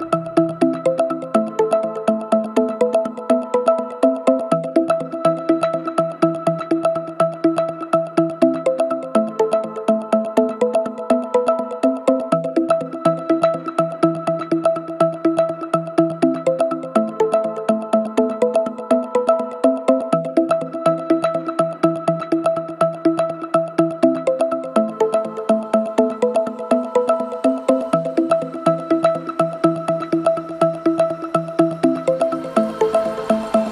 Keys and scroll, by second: 0.7 ], 13.1 ], 14.7 ], 20.9 ], 27.7 ctrl+z.